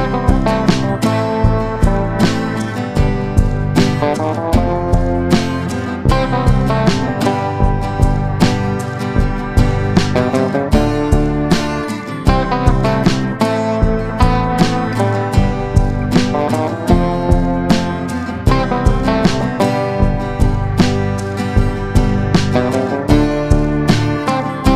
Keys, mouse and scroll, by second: 9.6 shift+click, 10.5 shift+Delete, 11.8-24.7 drag.